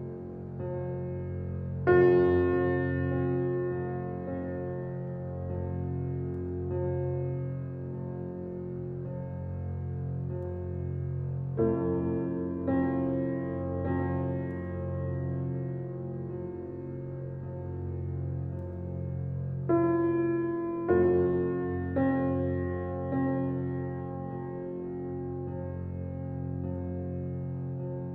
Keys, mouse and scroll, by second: 0.2 click, 1.4 e, 3.0 alt+middle click, 3.3 alt+middle click, 3.5 scroll up 1, 3.8 alt+middle click, 4.1 scroll up 1, 4.2 shift+middle click, 4.6 scroll up 1, 4.8 shift+middle click, 5.6 click, 5.8 click, 6.3 click, 6.9 g, 8.3 click, 8.7 click, 8.9 click, 9.1 middle click, 9.4 scroll down 3, 9.6 shift+middle click, 10.1 e, 13.4 middle click, 14.1 Tab, 14.3-14.7 scroll down 3, 14.7-16.3 middle drag, 16.3-16.7 scroll up 4, 16.7 click, 17.0 Tab, 17.4 click, 17.9 shift+click, 18.4 middle click, 18.8 shift+click, 19.3 click, 21.6 Tab, 21.8-22.5 scroll down 3, 22.1 drag, 22.5-24.0 middle drag, 24.7 click, 24.9-26.0 shift+middle drag, 26.0 g, 27.6 scroll down 2, 27.8-28.1 middle drag.